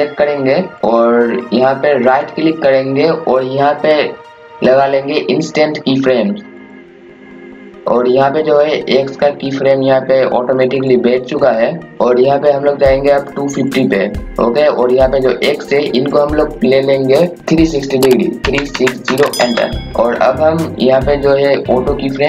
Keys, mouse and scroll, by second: 2.0 right click, 6.5 click, 18.4 KP_3, 18.7 KP_6, 19.1 KP_0.